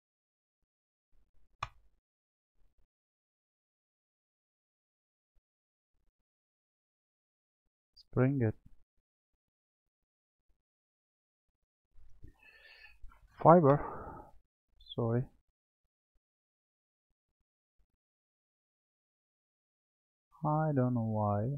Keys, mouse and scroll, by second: 0.5-3.6 drag, 11.6-14.7 drag, 20.6-21.5 drag.